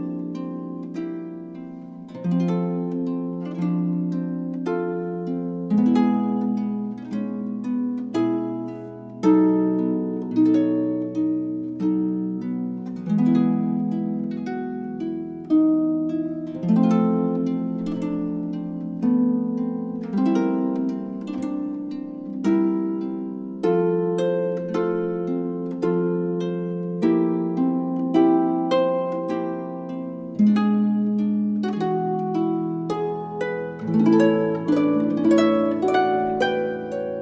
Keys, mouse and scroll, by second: 1.2-3.0 drag, 5.2-6.9 drag, 8.0-9.4 middle drag, 9.4 click, 10.3-11.3 right drag, 11.1-12.7 drag, 13.5-15.2 drag, 15.2-18.3 middle drag, 19.0-21.1 middle drag, 19.3 a, 21.1-22.2 drag, 22.9 middle click, 23.5 click, 23.7 middle click, 27.5 middle click, 27.7 middle click, 31.3-32.5 right drag, 32.9 z.